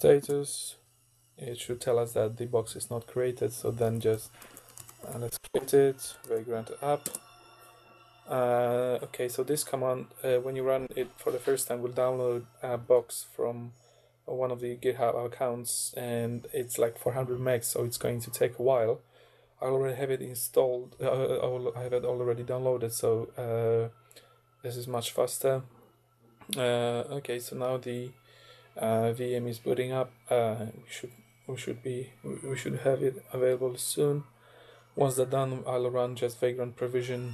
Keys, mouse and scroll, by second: 0.0-0.3 typing, 3.6-6.8 typing, 7.1 Return.